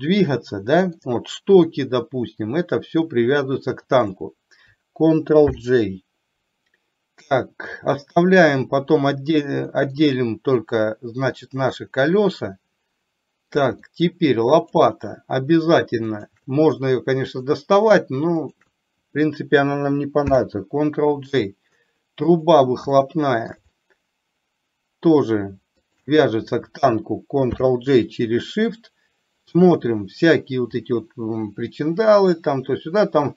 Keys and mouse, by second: 4.0 shift+click, 5.6 ctrl+j, 7.4-7.8 middle drag, 8.6 click, 9.8 middle click, 11.8-13.6 middle drag, 13.9 middle click, 16.2 shift+click, 17.5 click, 18.5 shift+click, 20.3 ctrl+j, 22.3 click, 23.1 shift+middle click, 23.7-25.3 middle drag, 25.9 shift+click, 27.6 ctrl+j, 30.9-33.1 middle drag.